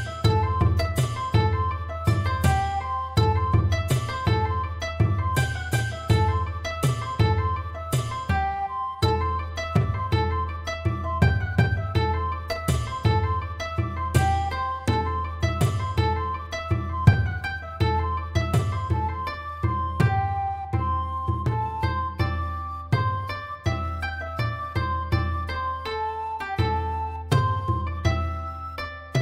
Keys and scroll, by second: 0.0-5.4 typing, 7.2-7.6 typing, 9.2 Return, 9.3-9.7 typing, 9.4 Return, 12.2-12.6 typing, 15.8-16.8 typing.